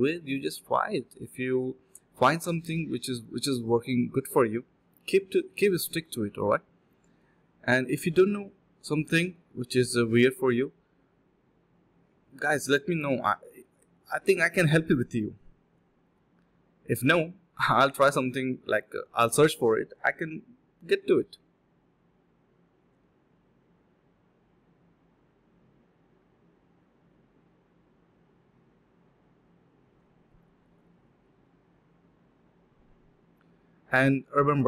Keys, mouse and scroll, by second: 1.2-2.3 typing, 1.2 alt+click, 5.6 alt+click, 7.0 alt+click, 10.0 alt+click, 10.3 alt+click, 11.4-11.9 typing, 12.0 alt+click, 13.4 alt+click, 13.5 alt+click, 15.1 alt+click, 15.8 alt+click, 16.4 typing, 16.9 alt+click, 17.1 alt+click, 17.2 alt+click, 17.8 alt+click, 18.6 alt+click, 20.0-20.6 typing, 22.3 alt+click, 22.5 alt+click, 22.6 alt+double click, 22.8 alt+double click, 23.1 typing, 25.1-25.4 typing, 25.5 alt+click, 25.8 alt+click, 26.5 alt+click, 27.4 alt+click, 27.8 alt+click, 34.3 f.